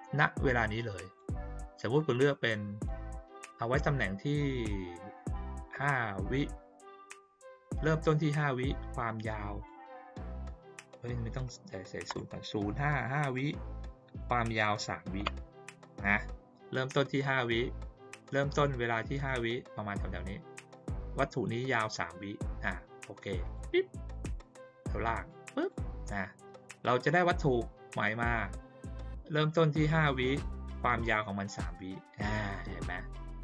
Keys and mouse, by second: 0.4 click, 2.1 click, 9.0 click, 10.9 click, 14.2 click, 23.4 click, 25.2 click.